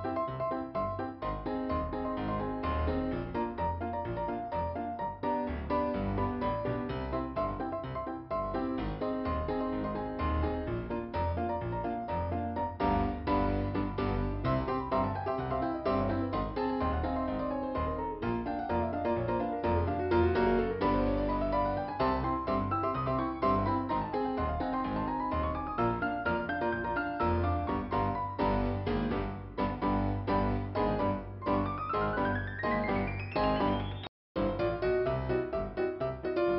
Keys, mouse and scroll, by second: 4.5 scroll up 2, 4.7 click, 4.9 click, 5.5-6.2 scroll up 1, 9.3-9.8 scroll down 1, 10.2 scroll down 1, 12.4 click, 21.6 click, 22.2 click, 23.4 right click, 24.7 click, 25.3-25.8 scroll up 1, 26.4 scroll up 1, 28.3-29.4 scroll up 1, 32.1 p, 32.5-32.8 scroll down 2, 34.7 middle click, 35.1-36.3 scroll up 2.